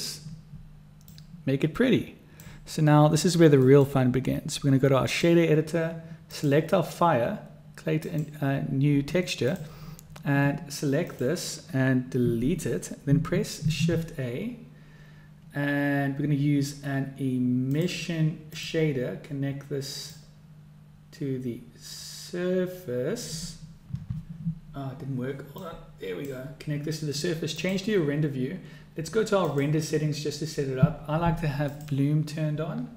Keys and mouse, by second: 1.0-2.5 drag, 3.6-5.2 drag, 6.3 click, 8.0 click, 11.1 click, 12.2 x, 13.5 shift+a, 20.3-23.3 drag, 25.9-26.5 drag, 28.1 click, 29.7 click, 32.1 click.